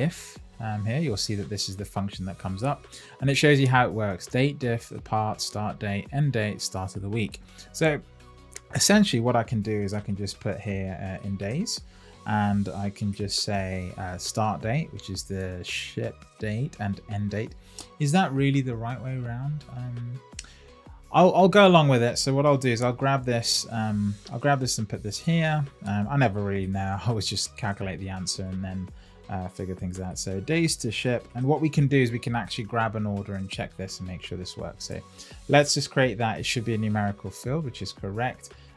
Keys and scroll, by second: 10.5 Left, 12.2 Right, 22.7 super+x, 24.3 super+v, 29.4 shift+d.